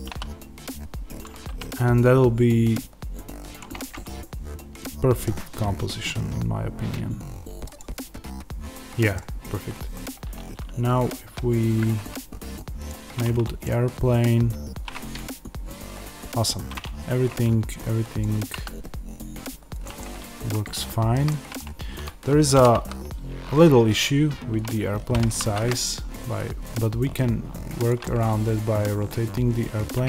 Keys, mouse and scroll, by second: 0.0 s, 1.1 click, 1.5 g, 3.5 click, 3.7-7.7 middle drag, 5.7-6.1 scroll, 7.7 click, 8.2-12.7 middle drag, 9.3-9.9 scroll up 1, 9.9-12.7 scroll down 1, 12.7 click, 13.5-18.1 middle drag, 16.7 scroll up 1, 17.2-17.5 scroll down 1, 18.1 click, 18.4 s, 19.7 click, 19.9-22.5 middle drag, 22.5 r, 24.6 click, 25.0 g, 27.8 click, 28.0-30.0 middle drag.